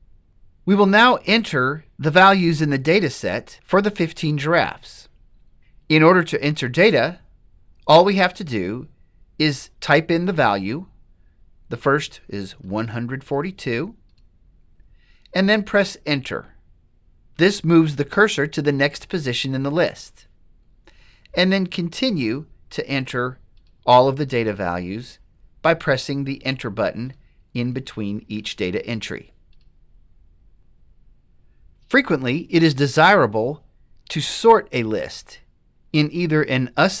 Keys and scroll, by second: 12.8 1, 13.4 4, 14.1 2, 16.1 Return, 21.7 1, 22.3 4, 22.9 3, 23.8 Return, 27.2 1, 27.8 4, 28.5 0, 29.6 Return, 30.6 Return, 30.6 7.